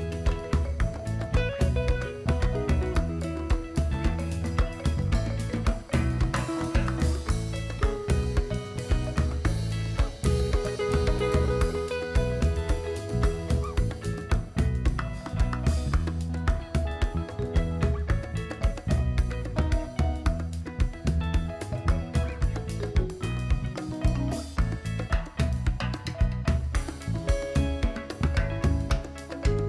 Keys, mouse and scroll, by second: 0.9 click, 2.4 click, 3.1 right click, 4.2-6.3 drag, 6.5-6.8 alt+scroll up 1, 6.8 alt+scroll down 1, 7.6 click, 8.6 alt+scroll down 1, 8.7 click, 9.1 alt+click, 9.4-9.7 alt+scroll down 1, 9.8 right click, 10.4 click, 10.9 alt+scroll up 1, 11.2 click, 12.2-12.7 alt+scroll up 1, 13.0 click, 15.6 click.